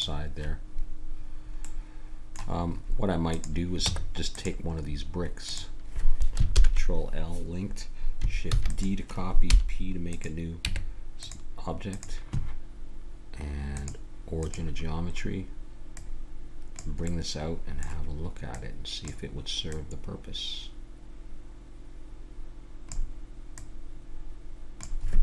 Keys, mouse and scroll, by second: 1.2-2.6 middle drag, 3.3-4.7 drag, 3.8 Tab, 4.8 middle click, 5.4-6.5 right drag, 6.5 ctrl+l, 8.5 shift+d, 9.5 p, 10.7 Tab, 11.9-15.5 drag, 15.9-17.1 drag, 17.1 middle click, 17.7-21.6 drag, 23.6-25.2 drag.